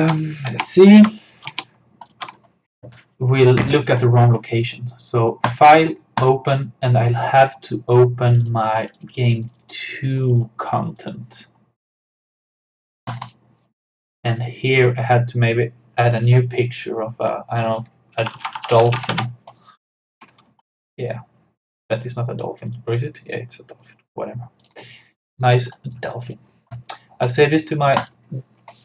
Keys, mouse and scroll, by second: 0.0 Tab, 0.5 alt+Tab, 1.0 alt+click, 2.1 alt+click, 5.5 click, 16.1 click, 16.2 click, 18.0-19.5 typing, 20.7 click, 25.4 right click, 26.3 click.